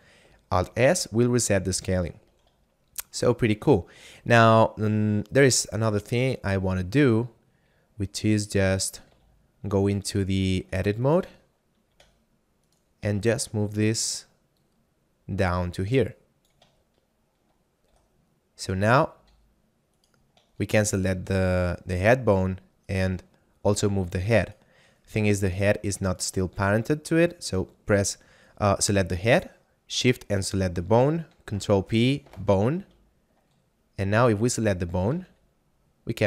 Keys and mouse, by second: 0.5 alt+s, 2.2 a, 2.9 shift+middle click, 3.9 middle click, 4.7 shift+middle click, 5.8 middle click, 9.2 z, 10.1 shift+middle click, 11.0 right click, 11.7 middle click, 12.1 Tab, 12.7 right click, 13.3 shift+middle click, 13.8 shift+middle click, 14.5 click, 16.9 shift+middle click, 17.9 Tab, 19.3 z, 20.1 right click, 20.6 shift+middle click, 22.1 r, 22.9 right click, 26.2 shift+right click, 31.3 ctrl+p, 32.3 Return, 32.9 a, 34.3 right click, 35.2 r.